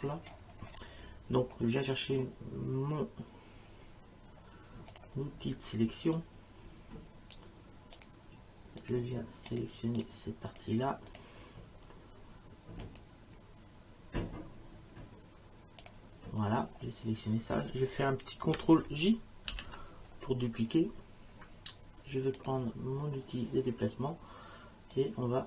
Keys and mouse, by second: 4.9 click, 6.1 click, 8.0 click, 12.8 click, 15.8 click, 19.5 ctrl+j, 22.4 click, 24.9 click.